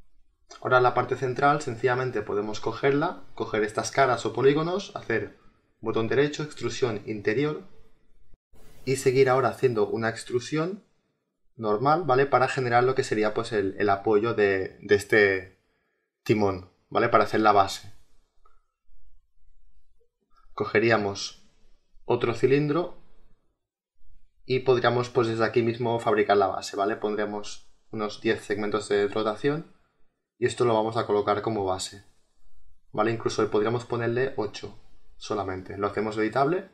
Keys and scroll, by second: 5.2 ctrl+z, 25.7 1, 26.0 0, 26.4 Return, 35.9 space.